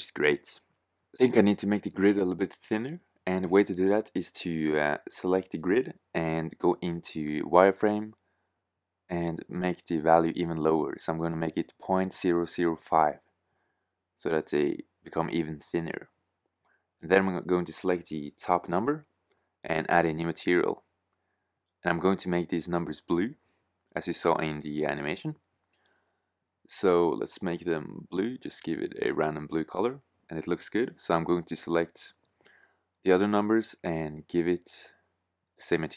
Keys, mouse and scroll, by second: 16.9 right click, 20.0 shift+z, 28.5 shift+z, 32.2 shift+z.